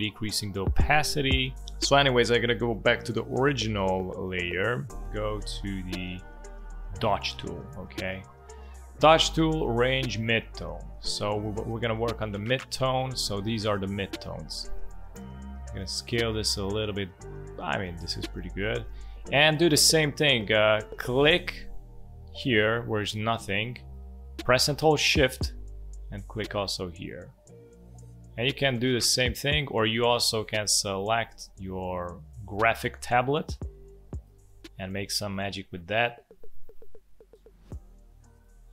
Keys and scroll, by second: 33.6 space.